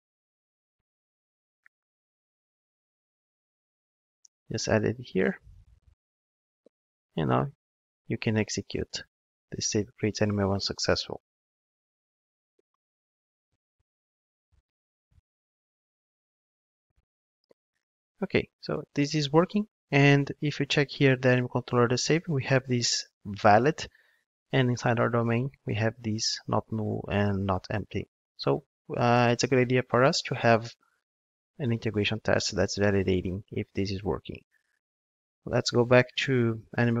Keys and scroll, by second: 0.0 ctrl+Tab, 4.7 super+v, 8.5 ctrl+shift+d, 28.0 ctrl+Tab.